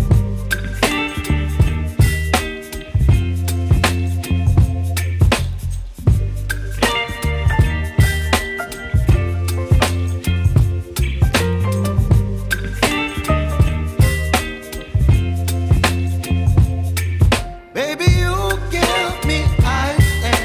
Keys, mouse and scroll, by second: 2.6 click, 4.8-7.5 shift+drag, 8.7 Right, 11.9 Right, 12.2 shift+b, 13.6-17.0 drag, 17.0-18.4 shift+drag, 18.4 scroll down 1, 19.1-20.4 drag.